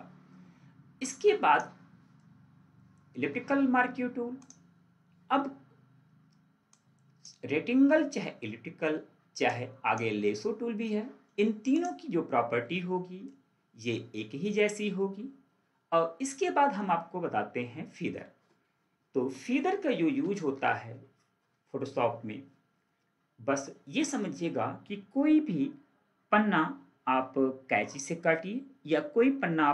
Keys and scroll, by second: 20.5 ctrl+d.